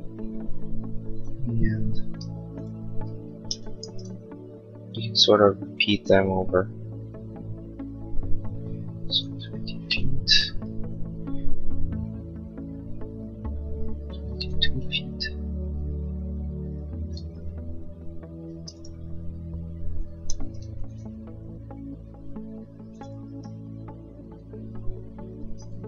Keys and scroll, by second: 3.4 m, 8.7-9.7 typing, 10.0 Return, 14.1 2, 14.7 ., 14.9 Return, 16.7-18.5 typing, 20.2 m, 25.5 space.